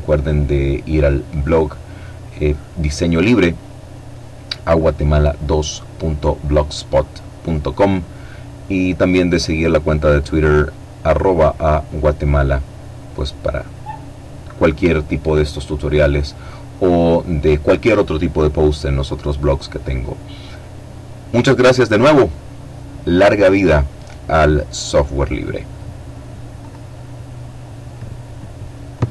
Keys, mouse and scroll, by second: 25.0 click, 27.4-29.1 drag.